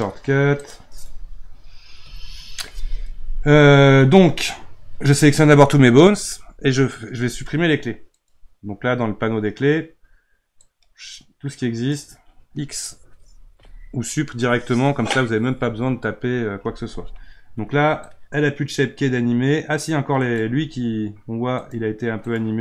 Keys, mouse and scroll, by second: 0.6 click, 2.0 n, 6.4 a, 8.1 click, 10.6-13.5 drag, 13.5 x, 18.1-20.4 drag, 21.6 click, 22.2 click.